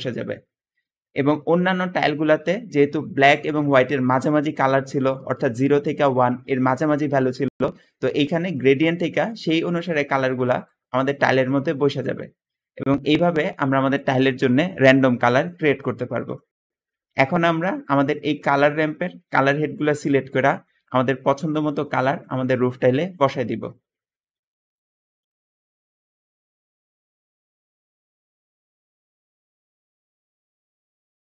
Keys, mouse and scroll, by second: 16.8 Escape, 16.8 Escape.